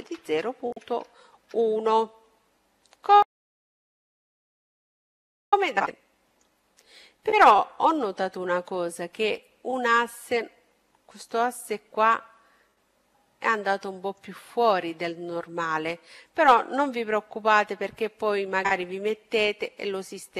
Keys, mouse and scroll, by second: 2.5-4.7 middle drag, 4.8-7.6 middle drag, 8.4-11.6 middle drag, 13.2-15.0 right drag, 14.2-20.1 middle drag, 19.9-20.3 right drag.